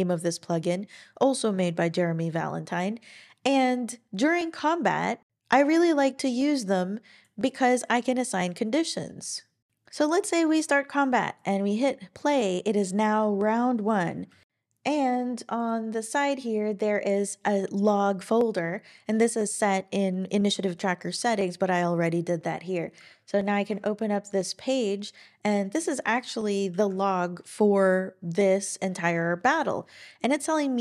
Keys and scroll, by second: 14.3 ctrl+super+l, 26.7 ctrl+super+l.